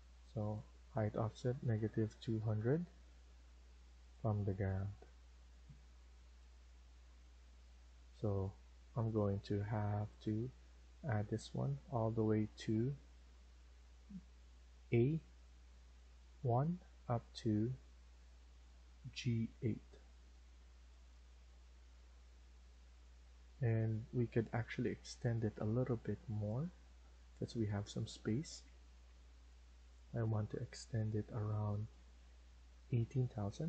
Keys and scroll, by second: 1.4-2.8 typing, 23.1 Escape, 23.5 Escape.